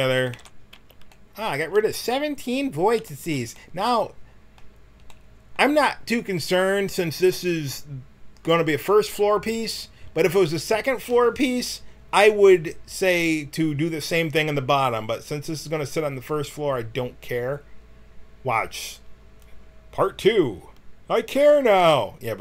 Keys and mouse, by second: 0.0 a, 0.2 w, 0.7 a, 14.2-15.8 middle drag.